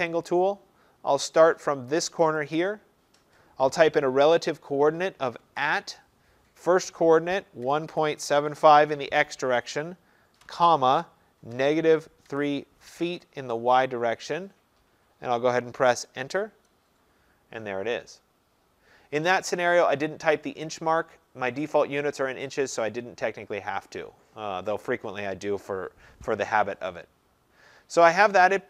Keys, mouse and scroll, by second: 0.3 click, 2.4 click, 5.4 @, 7.4-9.0 typing, 10.2-13.0 typing, 16.5 Return, 19.0 Return.